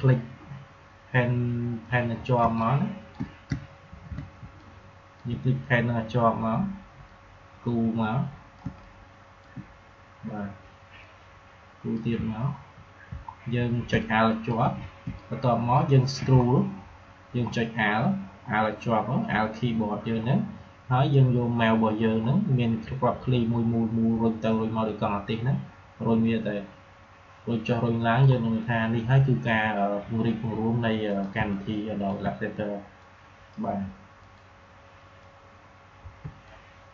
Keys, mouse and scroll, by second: 2.3 space, 2.5 click, 2.9 space, 3.9 ctrl+z, 4.3 space, 4.5 click, 4.7 space, 7.0-8.5 drag, 8.5 space, 8.7 click, 9.0 space, 10.9-12.4 drag, 12.4 alt+scroll up 1, 13.2 alt+scroll up 1, 13.7 space, 13.9 click, 14.3 space, 15.1 click, 15.4 space, 16.3 alt+scroll down 1, 16.7 alt+scroll up 1, 17.4 alt+scroll down 1, 18.9 alt+scroll up 1, 20.3 alt+scroll down 1, 21.1 scroll, 21.2 alt+scroll down 1, 22.1 alt+scroll down 1, 22.7 alt+scroll up 1, 23.8 alt+scroll down 1, 24.3 alt+scroll up 1, 25.4 scroll down 2, 26.7 alt+scroll up 1, 27.5 alt+scroll down 1, 28.2 alt+scroll up 1, 31.0 click, 31.3 space, 31.7 space, 32.9-36.9 drag.